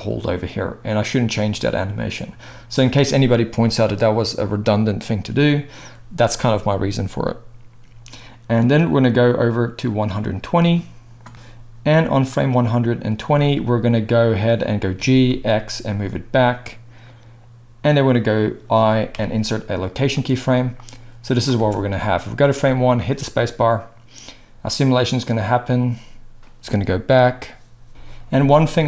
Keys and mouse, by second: 14.9 g, 18.0-20.8 middle drag, 19.1 i, 20.8-28.8 drag, 21.5 space, 26.6 space.